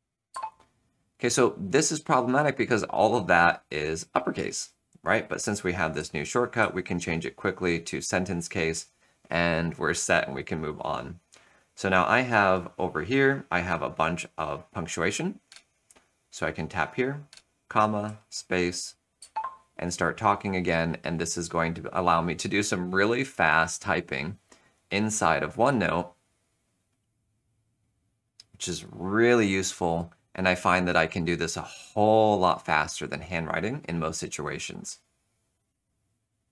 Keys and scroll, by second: 0.3 super+h, 5.9 shift+F3, 6.6 shift+F3, 17.2 ,, 18.0 space, 19.2 super+h.